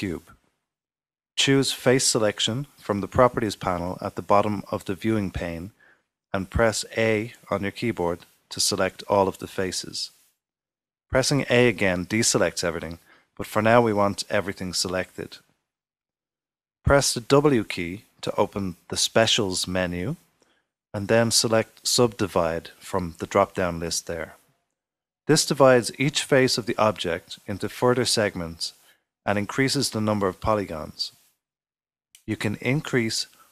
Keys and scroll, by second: 5.5 super+z, 9.7 a, 12.1-13.0 typing, 15.9 typing, 19.8 typing.